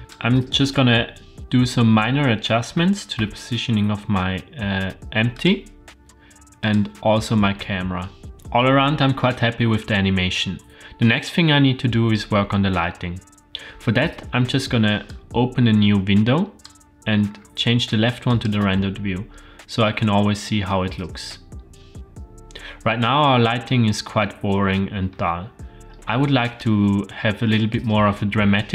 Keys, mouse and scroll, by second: 0.0 click, 2.7 g, 6.6 click, 13.5-15.0 scroll down 3, 15.0-16.6 drag, 17.3-18.1 scroll down 2, 18.4 click, 21.7-22.8 scroll up 4.